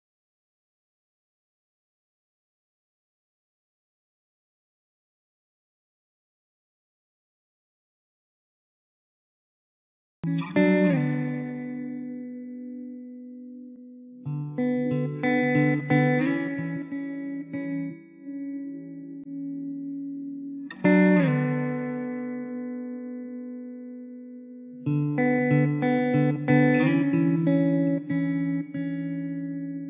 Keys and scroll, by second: 2.0 Return, 13.9 ctrl+alt+z.